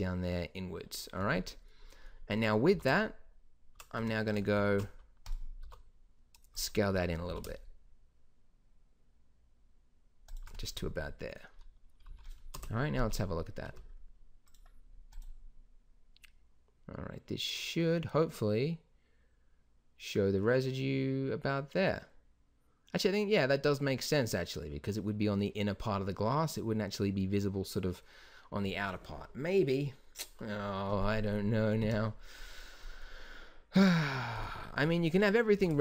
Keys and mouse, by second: 1.2 z, 1.5 middle click, 2.7 s, 4.5 ctrl+alt+shift+c, 5.6 s, 7.2 s, 12.0 z, 12.5 KP_0, 13.0 shift+b, 31.8 Escape, 32.2 middle click, 33.9-34.3 drag, 35.5 s.